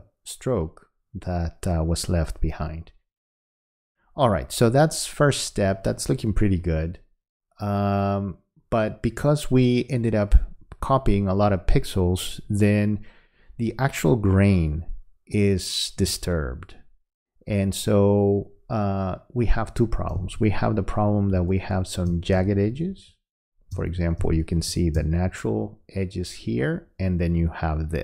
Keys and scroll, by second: 20.2 space, 22.4 space, 24.2 space.